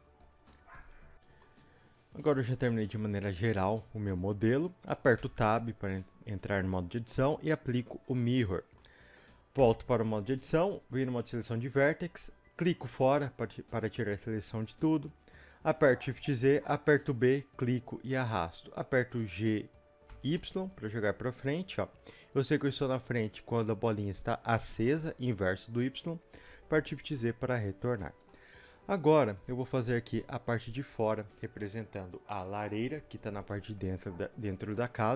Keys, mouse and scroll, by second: 0.5-7.5 middle drag, 5.2 Tab, 7.5-8.7 drag, 8.7-11.5 middle drag, 9.6 Tab, 11.5 click, 13.4 middle click, 15.9 shift+scroll up 1, 16.1 shift+z, 16.4-16.9 scroll up 1, 16.9 b, 21.7 click, 22.1 middle click, 26.7 shift+z, 27.1 middle click, 34.0-34.7 scroll down 1, 34.7 scroll up 1.